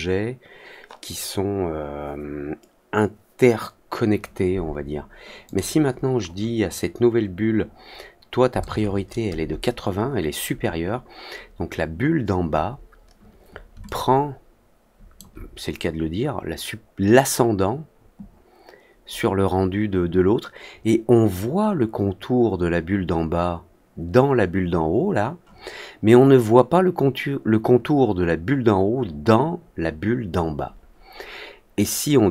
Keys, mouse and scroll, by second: 5.4 click, 13.8-15.1 alt+drag.